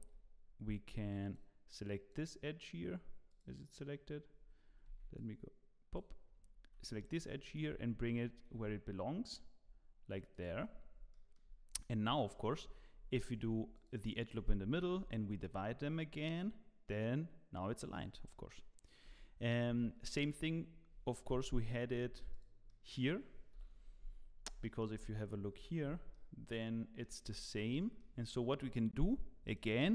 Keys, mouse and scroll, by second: 10.7-11.1 scroll down 3, 11.1 shift+middle click, 11.8 scroll up 1, 12.1 shift+middle click, 13.3 ctrl+r, 14.9 ctrl+b, 18.3 middle click, 19.0 Tab, 19.7 z, 20.0 middle click, 20.2 scroll down 2, 21.5 KP_Divide, 22.0 scroll down 2, 22.3 click, 22.7 middle click, 23.5 KP_1, 24.2-24.6 scroll down 6, 24.6 shift+middle click, 24.9-25.3 scroll up 3, 25.5 z, 25.8 scroll up 3, 26.1 shift+middle click, 27.2 Tab, 27.5 scroll down 1, 27.8 shift+middle click, 29.0 2, 29.4 click.